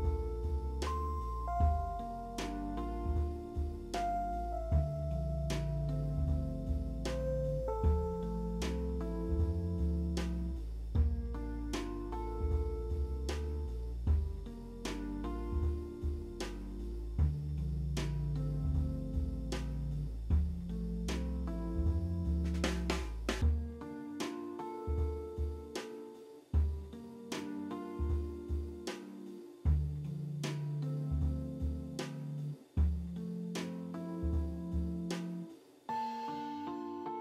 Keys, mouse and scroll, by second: 0.0 9, 0.0 0, 0.1 Return, 0.8 middle click, 1.6 ctrl+z, 2.3 alt+w, 2.9 e, 3.0 w, 7.2 alt+w, 7.9 e, 9.4 right click, 12.6 double click, 14.5 e, 14.9 right click, 26.6 ctrl+d, 27.6 c, 28.0 double click, 28.3 c, 28.8 double click, 29.3-32.3 typing, 29.7 click, 30.3 click, 31.2 double click, 31.9 double click, 32.7 double click, 33.3 alt+w, 33.9 alt+middle click, 34.5 z, 34.8 scroll down 3, 35.0 w, 35.2 alt+middle click, 35.5 shift+click.